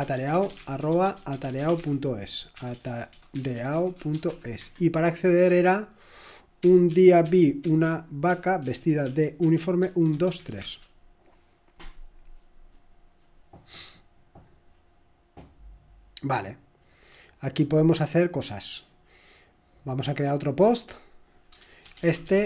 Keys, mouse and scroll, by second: 0.1-4.3 typing, 4.6 Tab, 6.6-10.6 typing, 11.8-12.6 typing, 21.7-22.4 typing.